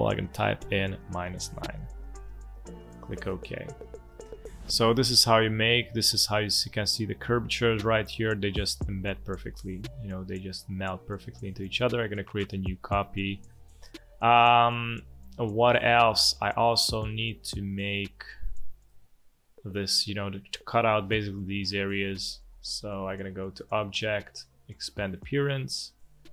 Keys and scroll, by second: 1.5-2.4 typing, 13.9 space, 17.6 space, 18.4 space, 19.3 space, 19.9 alt+space.